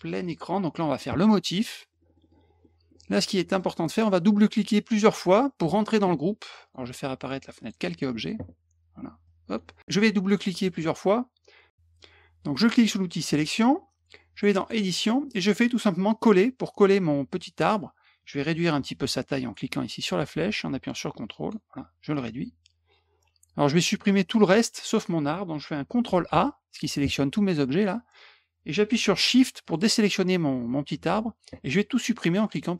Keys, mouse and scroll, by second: 0.2 click, 1.9 middle click, 2.0 middle click, 2.2 middle click, 2.6 middle click, 3.5 middle click, 3.9 click, 6.6 click, 7.6 click, 9.2 click, 10.3 click, 10.4 click, 10.6 click, 10.7 click, 13.2 click, 14.6 click, 16.1 click, 20.1-21.5 ctrl+drag, 22.1-22.9 drag, 26.3 ctrl+a, 29.6 shift+click.